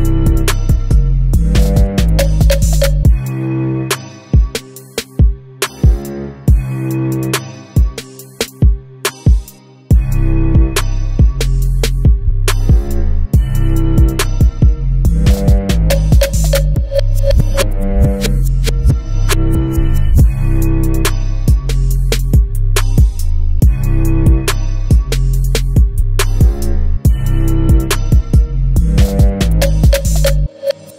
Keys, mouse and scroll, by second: 2.2 click, 4.3 click, 5.6-13.6 drag, 15.7 s, 17.9 click, 18.2 KP_3, 19.2 g, 20.4 click, 20.9-23.0 middle drag, 23.0-26.0 drag, 26.1-30.9 middle drag, 28.8 KP_3, 29.8 scroll up 1.